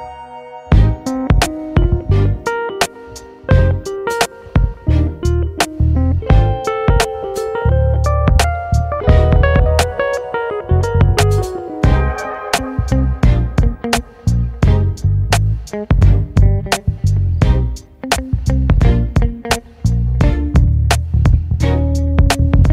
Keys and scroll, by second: 0.4 alt+e, 9.9 ctrl+z, 17.2 ctrl+z.